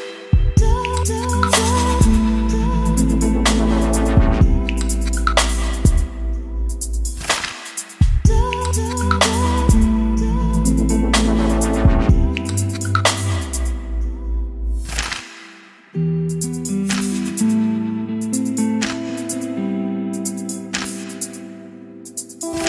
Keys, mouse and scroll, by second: 9.8 middle click, 10.7-22.6 drag.